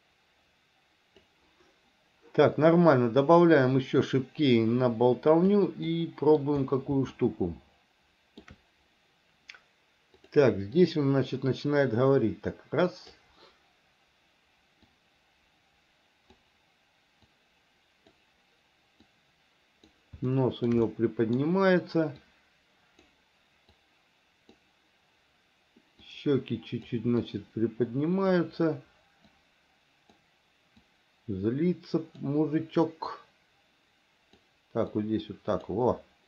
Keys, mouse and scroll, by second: 3.4 click, 4.9 click, 6.1 middle click, 7.3-8.6 shift+middle drag, 10.5 click, 11.0-13.5 drag, 15.1-16.7 drag, 17.5 click, 19.3 click, 20.5 shift+middle click, 21.1 middle click, 22.5 click, 24.0 click, 26.3 click, 27.4-28.6 drag, 29.6 click, 31.1-32.4 drag, 33.3-34.7 drag, 35.2 click.